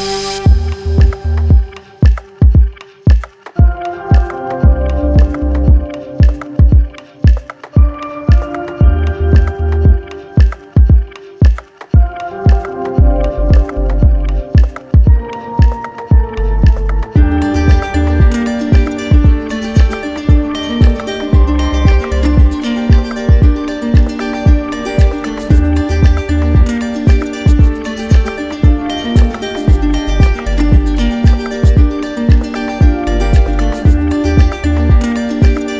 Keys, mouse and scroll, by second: 0.1 click, 1.1 click, 1.4 shift+click, 7.1 click, 7.5 shift+click, 8.5 alt+click, 9.2 alt+click, 9.4 shift+click, 10.5 click, 11.3 alt+click, 12.6 alt+click, 14.2 alt+click, 14.7 alt+click, 15.7 click, 16.5 click, 17.0 alt+click, 17.7 alt+click, 18.0-19.0 typing, 20.2 click, 21.6 ctrl+click, 23.8 ctrl+click, 24.3 ctrl+click, 28.3 click, 30.8 ctrl+click, 31.9 alt+click, 32.9 p, 34.7 p.